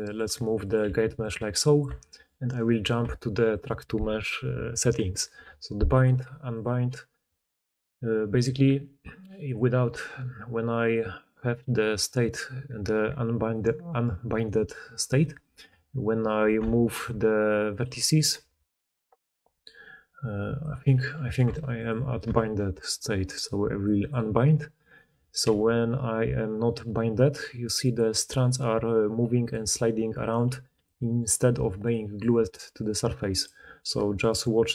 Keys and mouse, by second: 0.1 middle click, 0.2 r, 0.8 g, 1.4 r, 1.8 Tab, 2.2 middle drag, 2.4 click, 2.6 middle click, 3.4 click, 3.5-5.8 middle drag, 5.8-13.6 drag, 14.2 click, 15.2 r, 16.5 Tab, 16.5-17.7 drag, 17.0 r, 17.7-19.0 middle drag, 17.8 g, 18.3 r, 18.8 g, 21.3 r, 21.3-22.7 middle drag, 22.2 Tab, 22.8 middle click, 23.7-27.9 drag, 24.8 middle click, 24.8 right click, 25.4 g, 27.9-31.7 middle drag, 28.6 g, 30.4 g, 31.4-34.1 d, 31.7-34.7 drag.